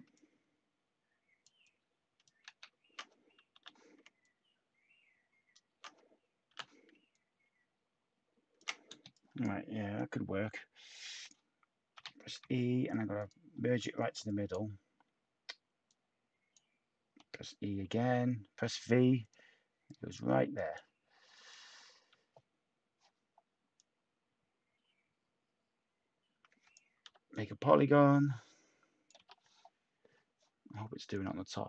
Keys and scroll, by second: 2.4 ctrl+z, 3.5 h, 6.4 t, 8.9 space, 11.7-12.9 typing, 17.1 e, 27.0 p, 29.1 p.